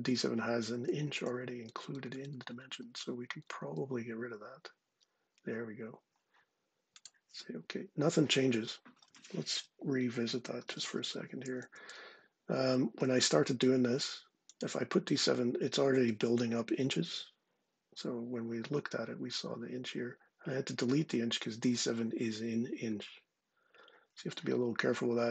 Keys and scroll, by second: 0.1-3.3 typing, 2.0 Delete, 4.1 Tab, 9.3-11.1 typing, 11.5 Down, 11.7 Return.